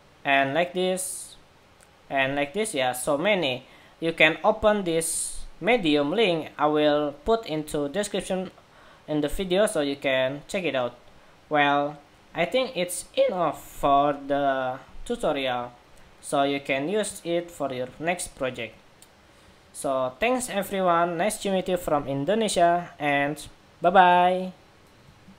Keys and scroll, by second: 25.2 shift+super+?.